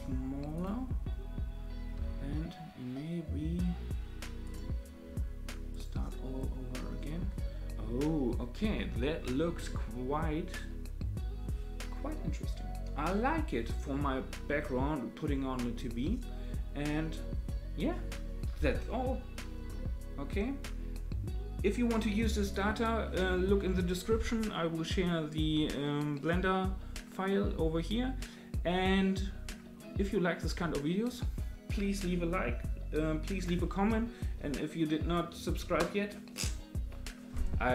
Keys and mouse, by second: 1.9 s, 5.7 click.